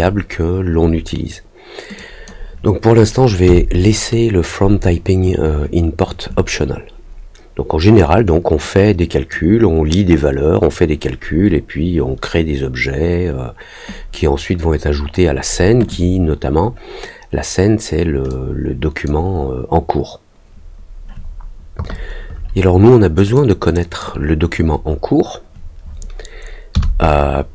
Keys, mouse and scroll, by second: 1.9 click, 8.5 click, 18.2 click, 23.3 click.